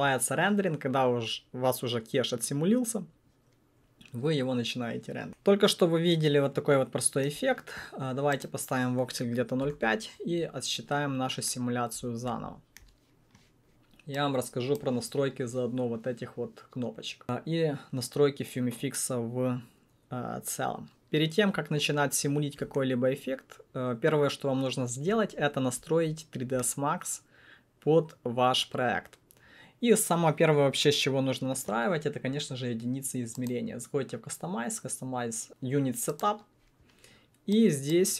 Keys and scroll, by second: 9.6 alt+BackSpace, 9.7 5, 9.8 Return.